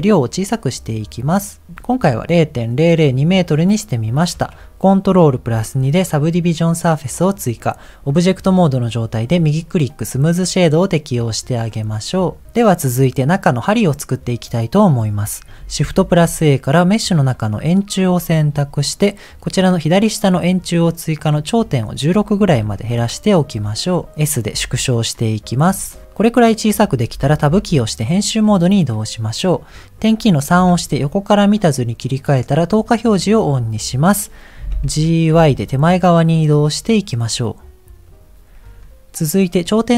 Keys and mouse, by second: 0.0-1.7 shift+drag, 5.6 ctrl+2, 15.9 shift+a, 20.5 click, 21.5-23.2 drag, 24.5 s, 27.6 Tab, 30.8 KP_3, 32.8 click, 34.7 g, 39.5 click.